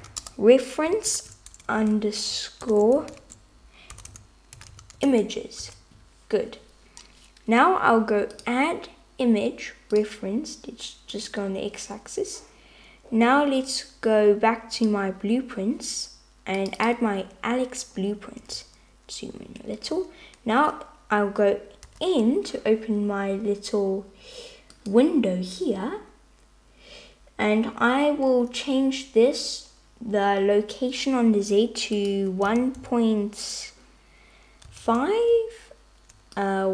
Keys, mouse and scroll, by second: 2.0 BackSpace, 8.4-10.1 drag, 21.9 n, 24.8 click, 32.0-35.4 drag, 36.5-36.7 drag.